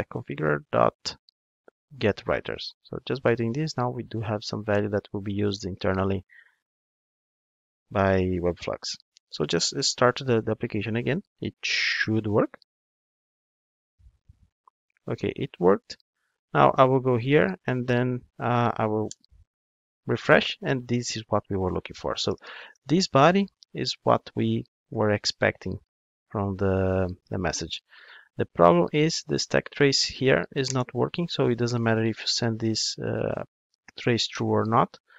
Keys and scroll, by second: 10.1 ctrl+d.